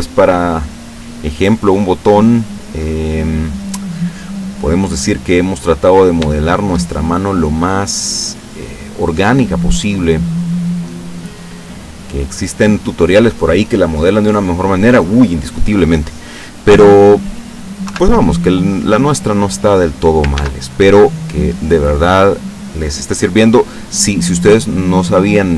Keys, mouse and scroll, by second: 0.8 click, 1.7 click, 2.6-3.9 drag, 3.9-4.3 scroll up 1, 4.8-5.7 middle drag, 5.4-6.1 scroll down 2, 6.4-8.2 shift+middle drag, 8.3-9.2 shift+middle drag, 9.3-10.0 middle drag, 10.2 scroll down 1, 10.8-11.6 middle drag, 11.6-12.0 scroll up 1, 12.5 scroll down 1, 13.8-14.2 scroll up 1, 14.5 scroll down 2, 16.8 scroll down 2, 17.9 KP_7, 19.2-19.7 scroll up 2, 19.7-20.0 scroll down 2, 20.4 ctrl+s, 20.7 ctrl+click.